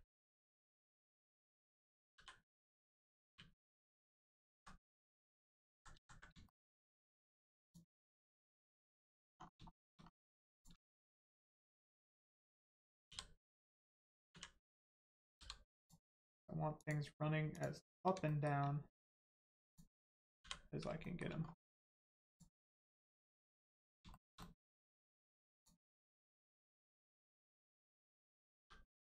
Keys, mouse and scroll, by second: 0.5 click, 2.1 l, 3.2 u, 5.3 click, 5.7 ctrl+z, 5.9 ctrl+z, 6.4 shift+middle click, 7.6 click, 7.9 scroll up 1, 8.2 shift+middle click, 8.8 scroll down 1, 9.6 shift+middle click, 10.0-10.5 scroll up 1, 10.5 click, 10.8 shift+middle click, 14.3 l, 14.3 u, 15.3 g, 15.8 click, 18.2 shift+middle click, 19.6 click, 20.4 l, 21.0 shift+middle click, 21.4 scroll up 1, 22.2 click, 22.8 middle click, 23.3 scroll down 1, 23.5 middle click, 24.1 shift+middle click, 24.4 middle click, 24.4 middle click, 25.5 click, 26.5 middle click, 28.5 g, 28.9 click.